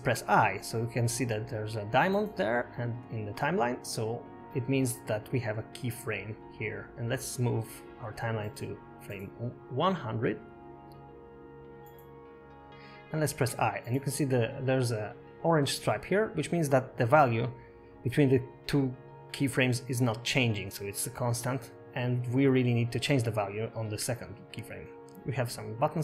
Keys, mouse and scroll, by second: 2.0 i, 9.3 click, 15.6 i, 19.1 click, 20.5 space, 23.3 space, 25.2 click.